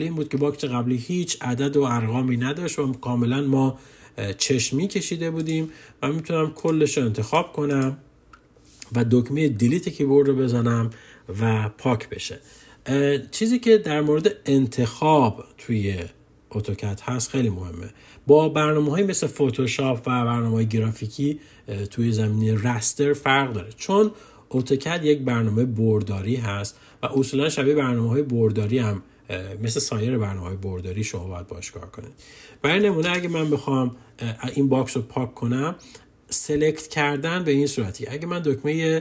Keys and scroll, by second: 9.1 Delete.